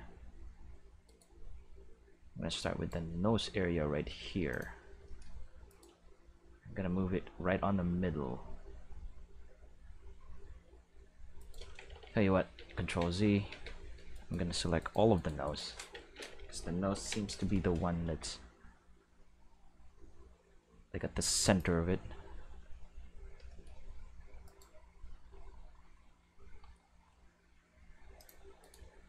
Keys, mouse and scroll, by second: 1.0 right click, 1.4 g, 2.6 right click, 3.1 g, 4.5 click, 5.6 right click, 5.8 g, 7.8-9.7 middle drag, 11.9 ctrl+z, 12.0 ctrl+z, 12.5 ctrl+z, 13.5 alt+a, 14.1 right click, 14.8 shift+right click, 15.1 shift+right click, 15.4 shift+right click, 16.9 ctrl+l, 18.0 g, 21.4 click, 24.4 right click, 24.9 g, 28.1 click, 28.6 right click, 28.7 click, 28.7 g.